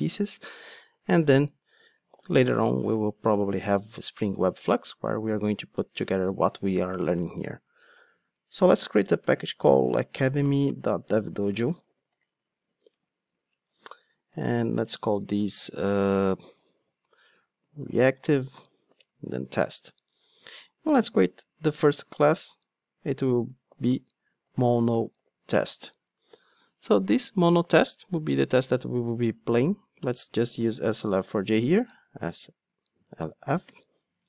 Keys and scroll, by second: 2.3 super+n, 20.9 super+n, 33.7 ctrl+space.